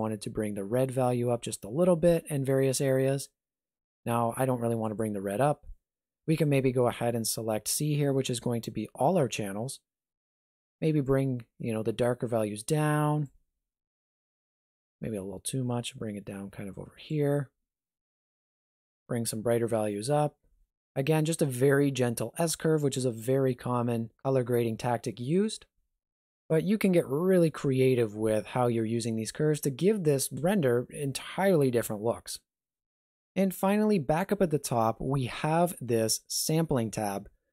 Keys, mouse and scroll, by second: 0.0 click, 4.8 click, 6.3 click, 11.0 click, 14.9 click, 18.4 click, 32.4 click.